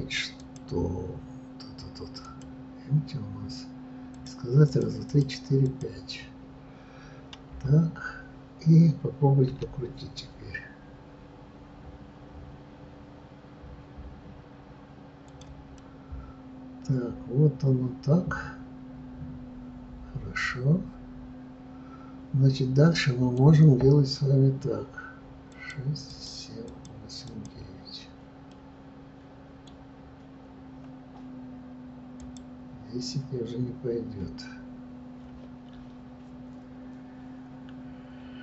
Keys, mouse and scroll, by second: 2.3-7.3 drag, 7.3 KP_3, 9.5 r, 15.7-18.8 middle drag, 25.7-28.4 drag, 28.4 scroll down 1, 28.5-32.3 middle drag, 32.3-38.4 drag.